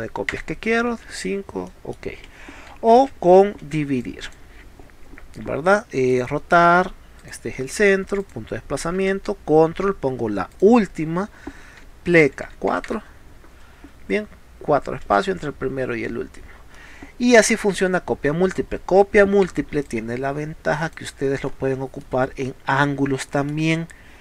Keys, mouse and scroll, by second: 1.7 middle click, 2.9 ctrl+z, 3.7 z, 3.8 space, 4.1 click, 6.1 click, 7.2 click, 7.6 middle click, 8.2 click, 10.6 ctrl+click, 15.1 space, 16.8 middle click, 19.9-20.9 drag, 22.0-23.2 middle drag.